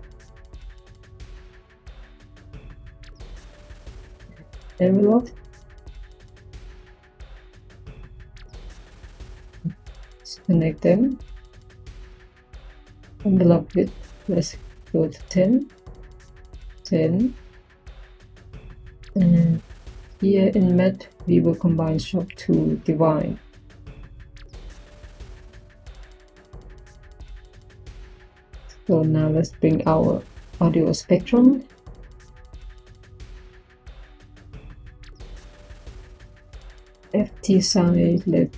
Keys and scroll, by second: 4.9 Tab, 5.1-6.7 typing, 30.2 Tab, 31.1-33.0 typing.